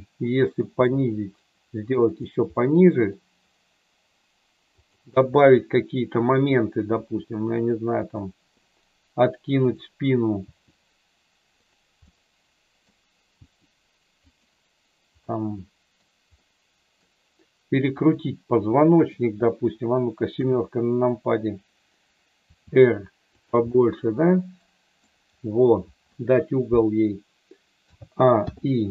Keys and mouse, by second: 0.7 g, 2.5 middle click, 4.8 click, 7.1 r, 8.0 click, 9.6 click, 10.3 r, 12.1 middle click, 13.3 r, 15.3 middle click, 16.4 middle click, 17.9 click, 20.3 KP_7, 22.3 r, 23.3 click, 23.7-25.1 middle drag, 27.8 a, 28.3 i.